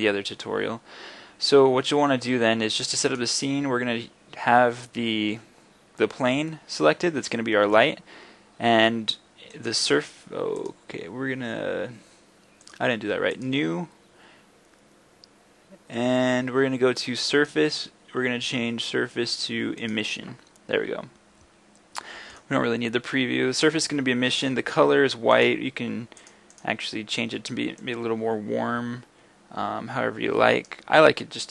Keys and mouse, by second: 7.0 middle click, 7.3 middle click, 7.4-19.2 drag, 19.2-22.3 middle drag, 22.3-31.5 drag.